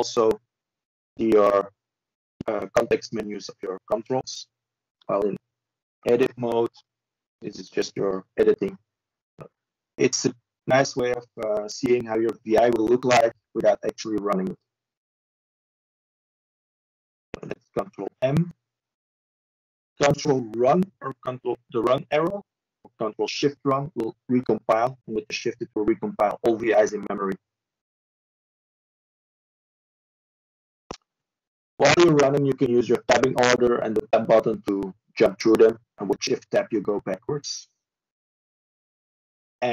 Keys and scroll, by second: 5.1 ctrl+m, 8.5 ctrl+m, 18.1 ctrl+m.